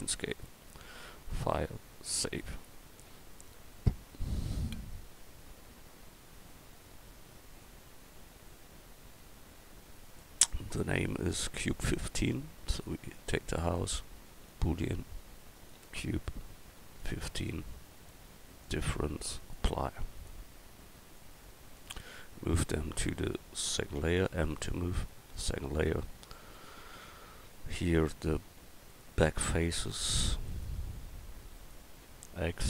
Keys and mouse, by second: 11.6-14.6 right drag, 13.6-18.0 drag, 20.2-24.0 drag, 20.2-24.0 right drag, 24.0 m, 26.0 click, 26.5 right click, 27.0 Tab, 32.3 x.